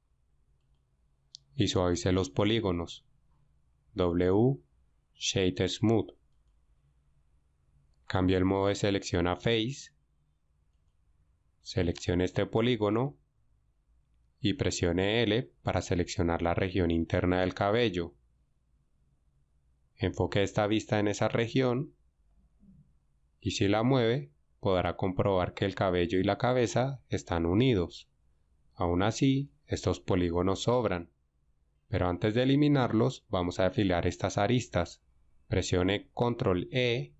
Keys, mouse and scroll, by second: 3.9 w, 9.5 ctrl+Tab, 21.7 KP_Decimal, 24.9 g, 29.3 right click, 36.6 ctrl+e.